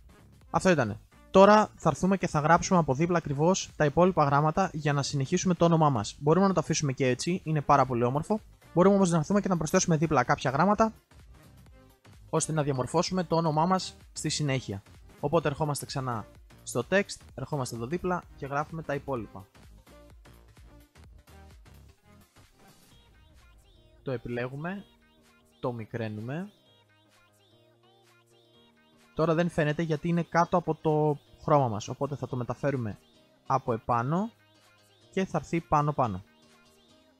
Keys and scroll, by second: 23.7 ctrl+a.